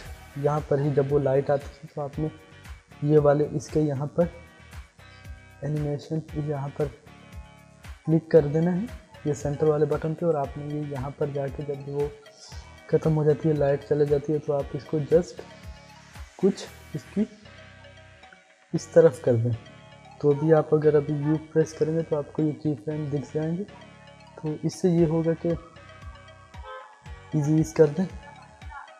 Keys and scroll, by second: 21.1 u.